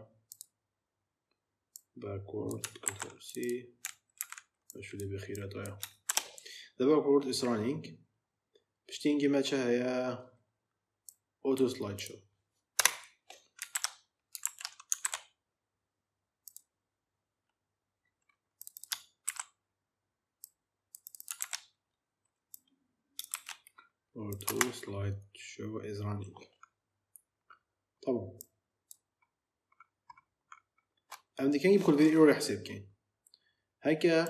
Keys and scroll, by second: 2.7 ctrl+c, 4.1 ctrl+v, 6.0 shift+b, 12.6 Return, 13.6 ctrl+v, 15.0 v, 16.5 ctrl+v, 19.1 ctrl+c, 21.3 ctrl+v, 23.2 shift+a, 24.3 space.